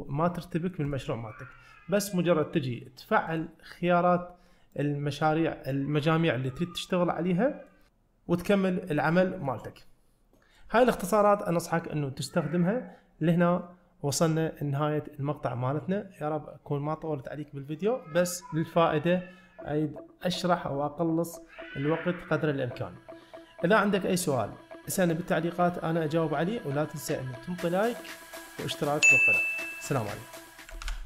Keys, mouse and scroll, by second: 0.4-0.8 middle drag, 0.9 click, 3.3 click, 4.8 click, 6.6-7.7 middle drag, 9.5-10.6 middle drag.